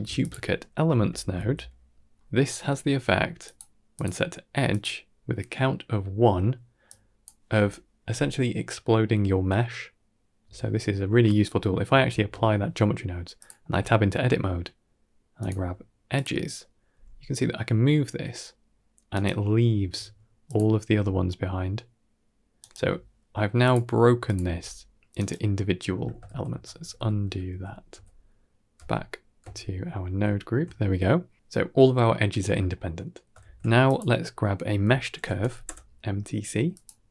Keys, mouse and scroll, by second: 0.8 BackSpace, 2.8 g, 3.8-4.7 drag, 6.7 click, 12.0 ctrl+a, 12.8 scroll up 1, 13.2 click, 14.0 Tab, 15.3 click, 16.0 click, 16.8 g, 19.7 a, 20.3 click, 20.7 g, 23.5 click, 24.1 click, 24.3 g, 25.8 Tab, 26.2 ctrl+z, 26.4 ctrl+z, 26.7 ctrl+z, 26.8 ctrl+z, 27.2 ctrl+z, 27.8 ctrl+z, 28.6 ctrl+z, 29.3 ctrl+z, 29.3 Tab, 29.6 Tab, 30.0 ctrl+s, 31.9-32.3 middle drag, 32.6 middle click, 33.3 shift+a, 37.0 g.